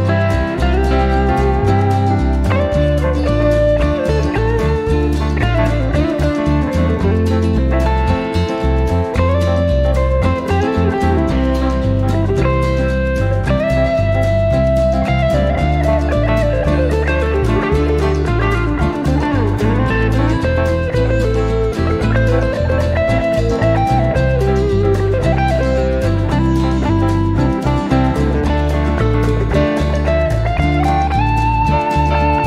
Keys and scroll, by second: 12.4 1, 21.8 1, 22.9 2, 26.6 3, 29.8 4, 32.3 5.